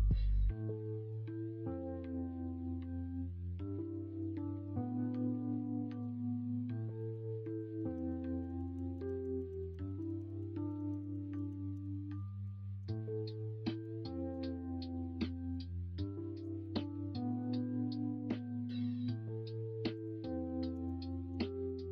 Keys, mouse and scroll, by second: 6.9 middle click, 7.8-12.1 ctrl+z, 12.2 middle click, 13.0 middle click, 13.5 middle click, 14.1 alt+z, 14.7 middle click, 18.8 middle click, 21.6 middle click.